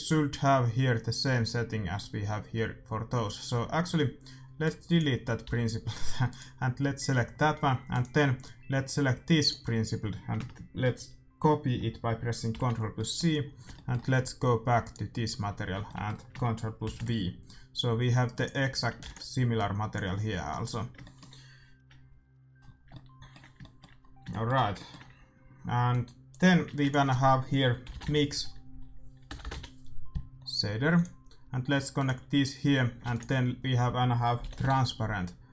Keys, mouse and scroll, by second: 4.6-6.5 drag, 5.4 x, 6.5-8.6 right drag, 7.8-9.4 middle drag, 7.9-10.3 drag, 9.9-12.5 middle drag, 12.5 ctrl+c, 12.9 middle click, 15.1-16.7 right drag, 16.8 ctrl+v, 17.7-22.2 drag, 18.9 ctrl+s, 21.0-22.8 middle drag, 22.8 shift+w, 25.9-27.6 drag, 26.6 shift+a, 29.3 BackSpace, 32.0-33.7 drag, 33.0 shift+a.